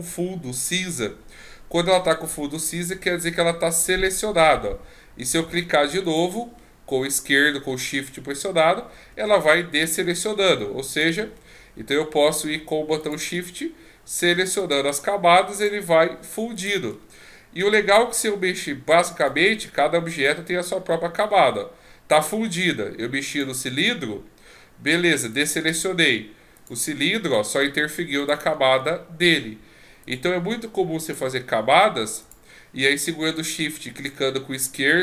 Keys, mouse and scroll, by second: 6.0 shift+click, 10.1 shift+click, 10.9 shift+click, 13.0 click, 14.6 click, 15.6 shift+click, 16.5 shift+click, 19.2 right click, 21.2 click, 25.3 click, 26.5 click, 28.2 click, 30.0 click, 31.0 click, 32.2 click, 34.0-35.0 shift+click.